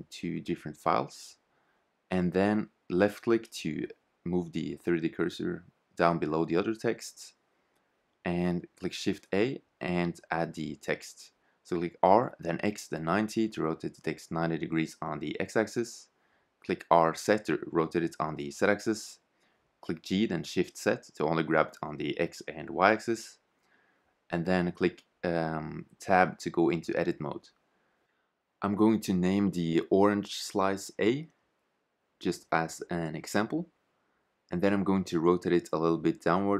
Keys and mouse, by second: 5.2-7.0 drag, 7.8 shift+a, 11.8 r, 14.8 r, 17.9 g, 20.7 s, 22.5 g, 24.2 Tab, 25.0 Tab, 25.6 shift+z, 27.6 Tab, 27.6 shift+z, 28.5-28.8 BackSpace, 29.7 shift+a, 30.6 Tab, 33.4 middle click, 35.2 middle click.